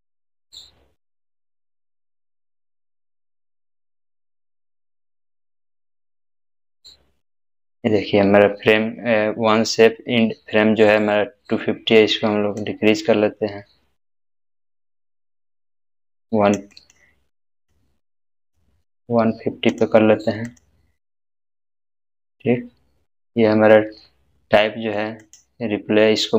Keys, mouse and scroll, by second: 2.6 scroll down 1, 12.6-16.6 drag, 22.3-24.4 scroll down 1, 25.2 scroll down 1, 25.2 click.